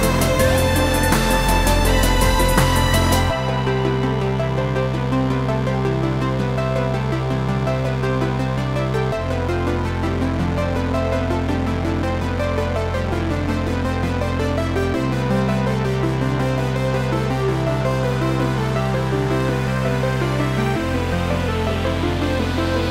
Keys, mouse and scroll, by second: 0.6 shift+right click, 1.5 shift+a, 1.9 s, 2.7 click, 3.0 s, 4.2 click, 4.4 g, 5.9 click, 6.2-9.8 middle drag, 7.1 KP_Decimal, 7.5-7.8 scroll down 1, 8.6 s, 9.8 click, 10.5 s, 11.6 click, 11.6-13.8 middle drag, 12.8 g, 13.8 click, 14.0 middle click, 14.3-14.7 scroll down 2, 15.3 shift+d, 17.7 click, 18.2 shift+d, 19.1 click, 19.4 s, 21.6 click, 21.9 s.